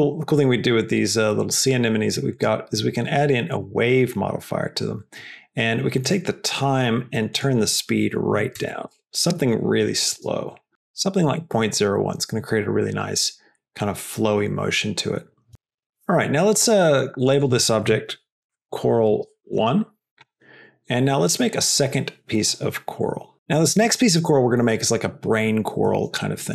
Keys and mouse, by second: 2.3-4.4 drag, 6.0 click, 7.2-9.5 drag, 10.0 space, 17.1 click, 17.3-20.2 drag.